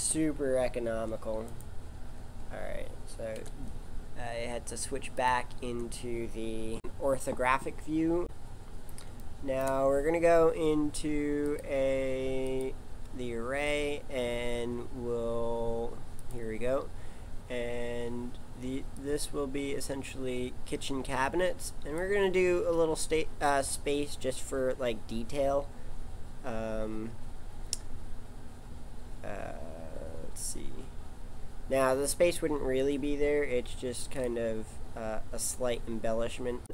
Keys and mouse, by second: 3.3 KP_5, 3.3 g, 8.2 KP_7, 9.2-10.3 drag, 18.9 click, 34.1 click, 36.6 Tab.